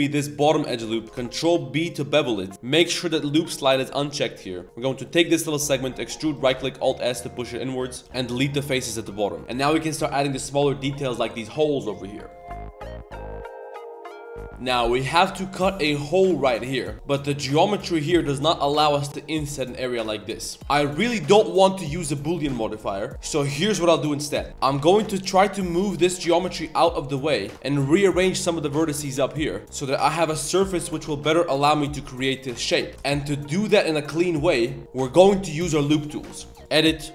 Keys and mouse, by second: 0.3 middle click, 0.8 middle click, 1.0 ctrl+b, 1.0 z, 2.5 z, 3.2 click, 3.9 middle click, 4.7 middle click, 5.0 middle click, 8.0 Tab, 8.0 ctrl+z, 8.1 x, 9.0 Tab, 9.2 middle drag, 9.4 ctrl+s, 9.4 a, 14.5 z, 16.5 shift+middle drag, 17.4 ctrl+shift+click, 20.6 ctrl+z, 24.3 shift+middle click, 24.5 z, 24.5 1, 24.9 click, 26.3 click, 27.4 click, 28.5 click, 29.1 z, 29.6 g, 29.6 z, 29.7 3, 29.9 click, 30.4 ctrl+shift+click, 31.1 i, 32.9 ctrl+z, 33.0-36.9 shift+middle drag.